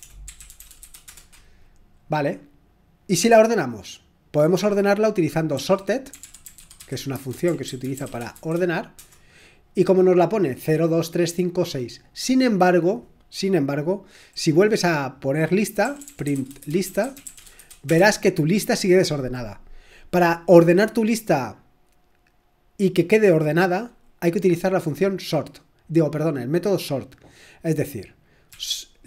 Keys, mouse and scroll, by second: 0.0-1.6 typing, 2.9-3.6 typing, 5.6-8.8 typing, 9.0 Return, 15.6-18.1 typing, 28.4-29.0 typing.